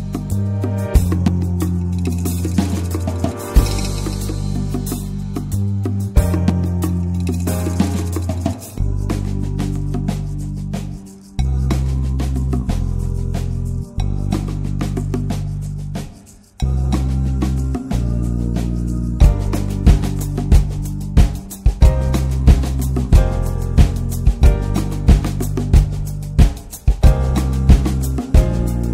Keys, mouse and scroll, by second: 0.1 shift+middle click, 0.7 click, 1.1 scroll down 2, 1.3 middle click, 1.9-3.5 drag, 3.5 scroll down 4, 3.8 middle drag, 4.1 drag, 4.2-5.7 scroll up 3, 4.4 middle click, 4.8 middle click, 5.7-6.2 scroll down 1, 6.2 click, 6.5-6.8 shift+middle drag, 6.8 shift+scroll up 2, 7.0-7.7 middle drag, 7.7 ctrl+s, 7.8-8.1 scroll down 2, 8.4 alt+z, 8.7-9.0 middle drag, 9.0 alt+z, 9.3-9.9 drag, 11.5 h, 11.9-12.3 middle drag, 12.3 scroll up 1, 12.5 ctrl+s, 12.9 click, 15.3-16.4 drag, 16.6 middle click, 16.7-17.3 scroll up 1, 17.3 scroll down 2, 17.6-17.9 middle drag, 17.9-18.3 drag, 18.4-18.8 scroll up 2, 18.8 shift+click, 19.2 shift+click, 20.2 ctrl+l, 20.6 click, 20.8-21.4 middle drag, 21.4 ctrl+s, 22.9-25.4 drag, 28.5-28.9 scroll down 1.